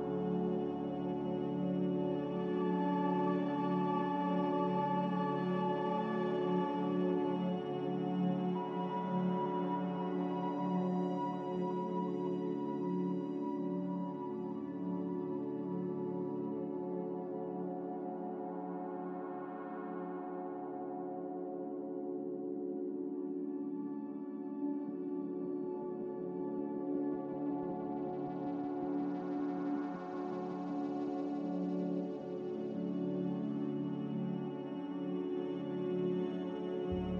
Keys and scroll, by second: 10.1 Delete, 10.8 b, 14.4 z, 32.8 Delete.